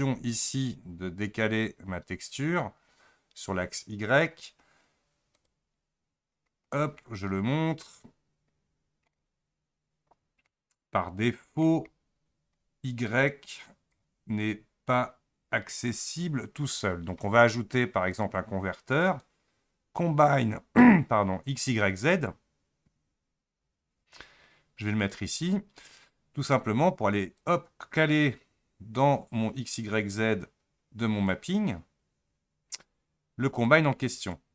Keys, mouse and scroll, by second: 13.3-24.0 drag, 31.4-33.6 drag.